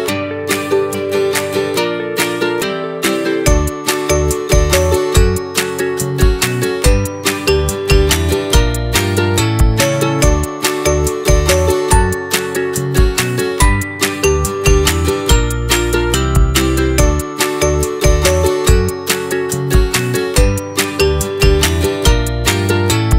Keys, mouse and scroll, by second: 0.9-1.9 scroll up 4, 1.9 r, 5.8 s, 7.4-8.6 middle drag, 8.6 click, 9.0 middle click, 9.3 a, 9.9 f, 10.5 middle click, 11.1 e, 13.3-13.7 scroll up 1, 13.7-15.1 middle drag, 15.1-16.5 drag, 16.5-17.6 scroll up 2, 17.6 click, 18.6-19.6 drag, 20.2-21.4 drag, 21.5 right click, 22.5-23.1 middle drag.